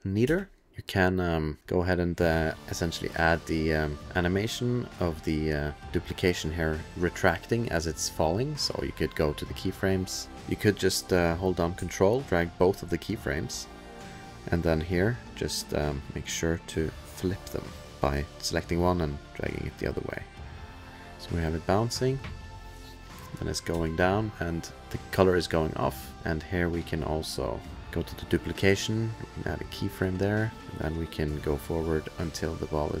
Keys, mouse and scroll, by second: 0.2 space, 0.7 click, 1.9-3.8 click, 3.4 click, 4.7 click, 6.2 click, 8.8 click, 10.2 middle click, 10.2 click, 10.2 BackSpace, 10.7 middle click, 11.1 middle click, 12.3 click, 12.3-13.7 ctrl+scroll, 13.7 ctrl+click, 14.2 ctrl+scroll, 15.0 click, 15.6 click, 16.0 click, 16.6-17.0 click, 17.1 click, 17.8 click, 19.2 click, 20.2 click, 20.9 click, 21.2 ctrl+s, 21.2 click, 21.2 space, 23.7 space, 24.2 click, 27.2 click, 27.8 click, 29.7 click, 31.1 click.